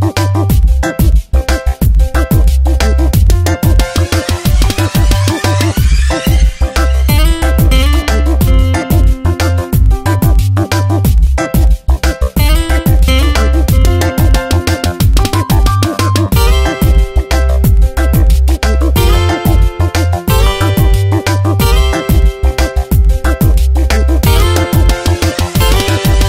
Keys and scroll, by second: 2.4 F9, 6.2 ctrl+z.